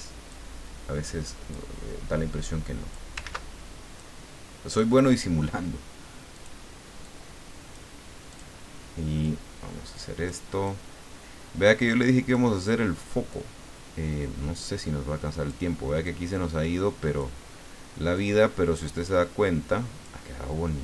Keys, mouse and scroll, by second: 0.3-1.8 drag, 2.4 click, 3.3 ctrl+z, 4.0 click, 6.3 click, 7.1 click, 8.3 click, 9.2-10.5 drag, 10.7-12.7 drag, 13.3-15.7 drag, 16.1-17.5 drag, 18.1-20.2 drag.